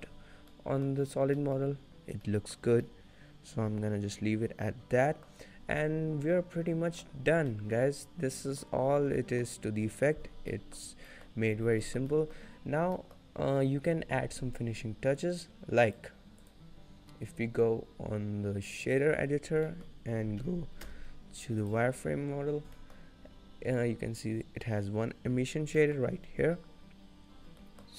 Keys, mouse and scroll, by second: 0.6-1.0 scroll up 2, 1.2 middle click, 1.2-2.4 scroll down 2, 1.7 middle click, 2.4 middle click, 3.0 middle click, 5.7-6.1 scroll down 1, 6.1 middle click, 7.4-8.2 scroll up 2, 7.8 middle click, 8.8 scroll down 2, 9.2 middle click, 10.6 middle click, 11.2 shift+middle click, 11.3 shift+middle click, 11.8 scroll down 1, 11.9 shift+middle click, 12.2 middle click, 12.8-13.1 scroll up 3, 13.1 middle click, 15.4 click, 16.7 click, 19.7 scroll up 4, 19.8 middle click, 20.9 n, 21.7 click, 22.4-23.1 scroll up 3, 22.9 middle click, 23.3 scroll down 4, 23.9-24.7 scroll up 2, 25.2-25.9 scroll down 2, 25.9 middle click, 26.3 scroll down 1, 27.5 scroll down 2, 27.7 middle click, 27.7-27.9 scroll up 1.